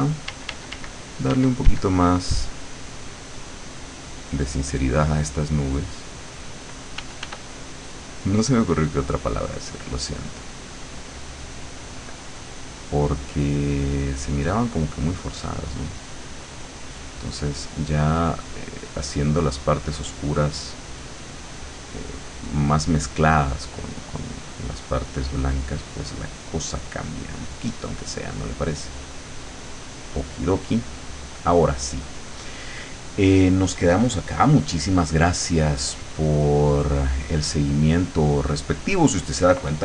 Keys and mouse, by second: 0.3 d, 2.3 click, 2.7-6.3 drag, 7.1 f, 7.5 click, 7.9 click, 9.9 click, 13.6-15.9 drag, 18.1-19.1 drag, 24.2-32.8 drag, 35.5-38.8 drag.